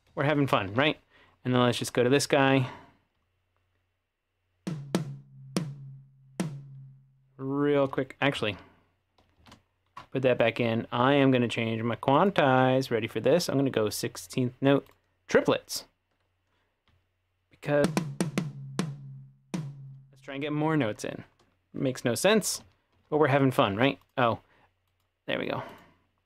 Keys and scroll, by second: 8.3 super+z, 8.5 super+z, 9.4 shift+super+z, 22.6 ctrl+3, 22.9 ctrl+4.